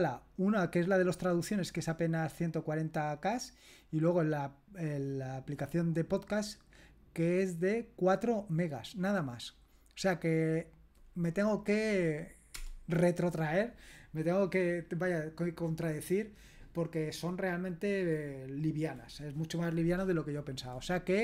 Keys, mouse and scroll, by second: 12.6 Return.